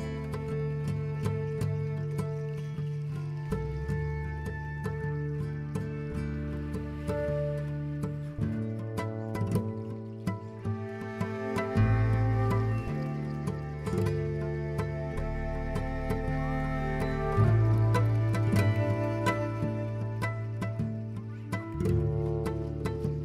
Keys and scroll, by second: 3.7 b, 11.9 z, 14.8 b, 19.7 z, 21.4 ctrl+alt+1, 21.6 ctrl+alt+1, 22.1 b.